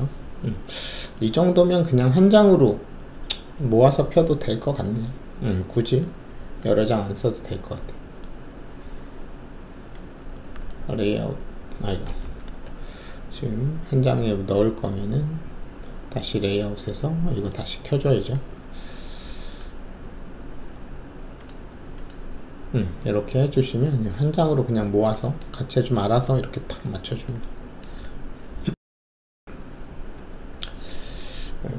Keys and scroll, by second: 10.5 z, 12.2 ctrl+z.